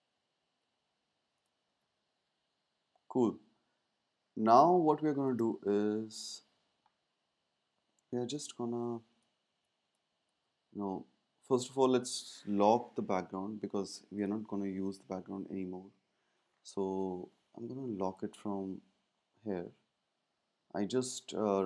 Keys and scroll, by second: 1.7 super+s, 4.5 space, 10.3 super+z.